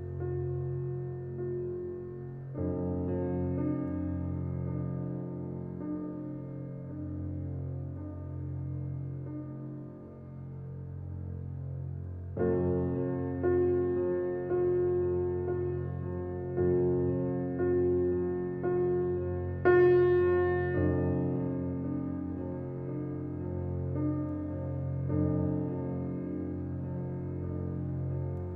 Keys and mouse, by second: 0.0-1.4 typing, 2.4 click, 3.3 Tab, 4.3-5.1 typing, 5.4 click, 6.8 typing, 8.0 click, 8.2-9.9 typing, 8.5-9.5 drag, 11.0-13.6 drag, 14.4 m, 16.0 click, 18.8 click, 19.9 click, 21.3 click, 22.4 click, 23.9 Tab, 24.4-25.6 alt+drag, 26.2 1, 27.3 typing, 28.3-28.5 drag.